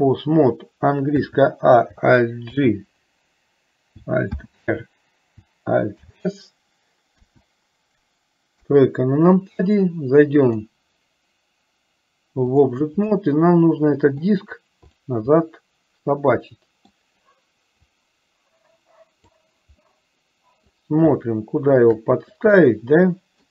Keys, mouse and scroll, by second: 1.3 a, 2.6 alt+g, 4.5 alt+r, 6.1 alt+s, 7.2 KP_1, 8.7 KP_3, 10.5-12.9 drag, 13.2-14.5 middle drag, 15.0 click, 15.6-17.1 middle drag, 18.1-19.7 drag, 20.1 middle click, 21.4 shift+middle click, 22.6 middle click.